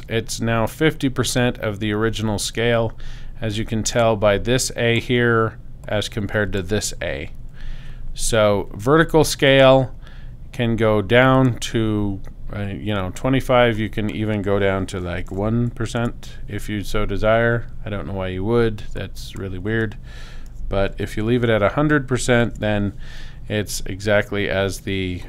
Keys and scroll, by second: 15.3 i, 16.0 Tab, 20.5 i, 21.0 0, 22.5 Tab.